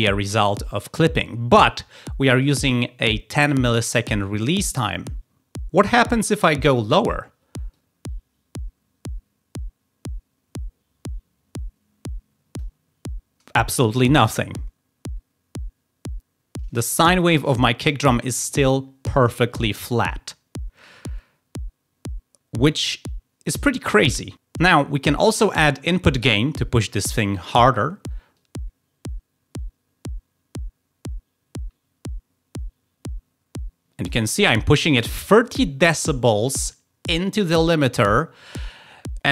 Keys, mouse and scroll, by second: 7.7-12.6 drag, 28.3-34.1 drag.